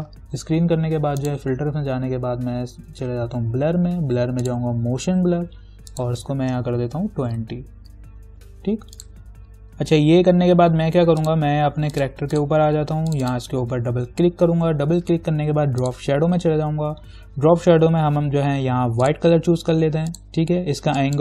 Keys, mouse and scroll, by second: 1.5 click, 4.6 click, 7.1-7.5 typing, 9.2 click, 11.5 click, 16.0 click, 19.3-21.2 drag.